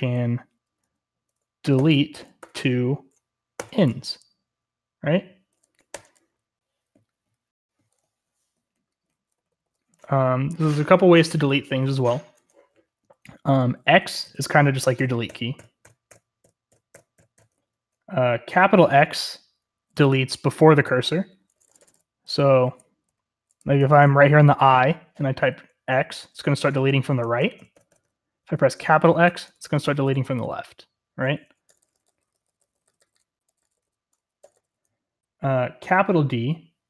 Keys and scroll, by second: 1.7-3.5 typing, 5.9 typing, 8.0-9.6 typing, 13.5-17.4 typing, 21.0-24.3 typing, 26.1-30.4 typing, 31.7-34.5 typing.